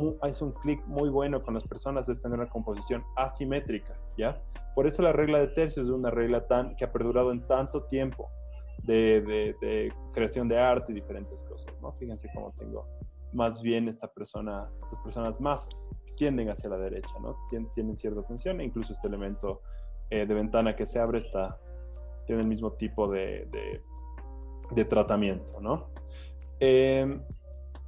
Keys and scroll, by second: 4.1 c, 5.2 Escape, 7.0 c, 19.4 Home, 20.4 Home, 21.5 z, 23.3-24.1 typing, 25.5 z.